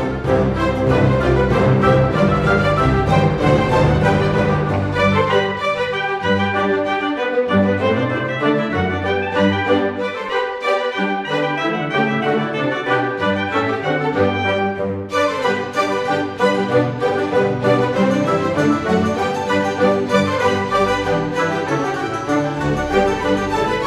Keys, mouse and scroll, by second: 0.5 click, 1.0 click, 1.3 s, 2.4 click, 2.9 click, 3.1-3.5 scroll up 1, 3.7-5.7 drag, 6.2 click, 6.7 scroll down 1, 7.0-7.3 scroll up 1, 7.4 click, 8.1 click, 9.3-10.3 drag, 10.9 click, 13.4 click, 14.9 click, 16.1 click, 16.7 click, 17.2-18.5 drag, 18.7 click, 19.7 Delete, 20.7-22.0 drag, 22.8 a, 23.7 click.